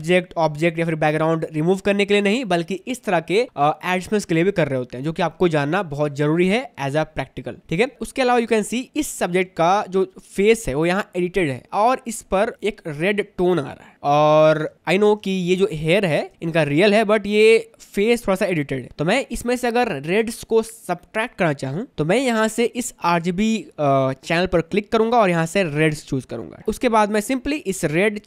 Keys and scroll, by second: 9.8 space, 13.9 space.